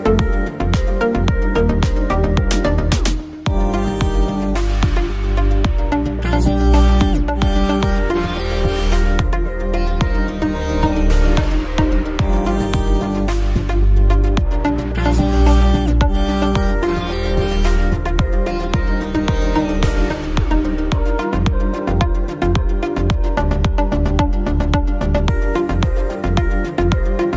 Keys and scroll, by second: 2.1 shift+space, 13.1 ctrl+t, 18.7 shift+space, 21.5 shift+space, 25.7 w, 27.1-27.3 typing.